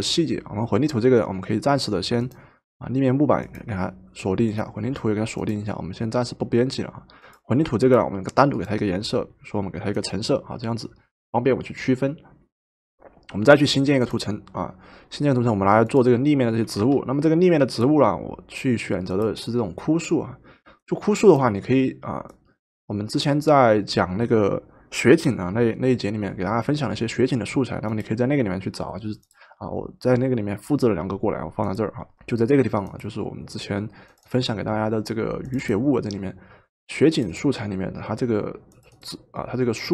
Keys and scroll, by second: 16.7 v.